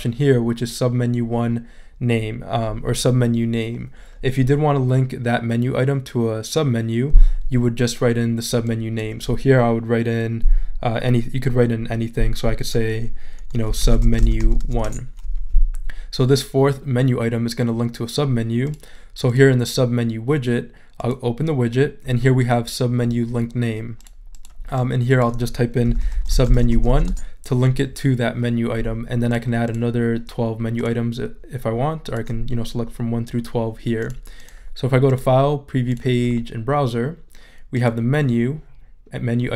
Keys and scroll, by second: 13.4-15.1 typing, 25.6-27.4 typing.